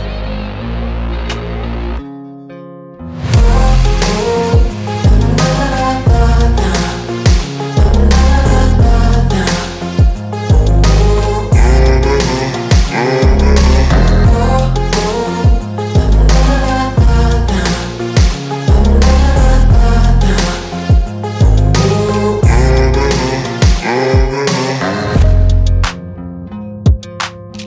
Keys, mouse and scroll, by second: 7.1 super+-, 8.0 click, 15.5 super+Num_Lock, 15.6 click, 15.8 super+=, 19.5 super+-, 20.7-21.4 drag, 25.0 click, 27.3 click.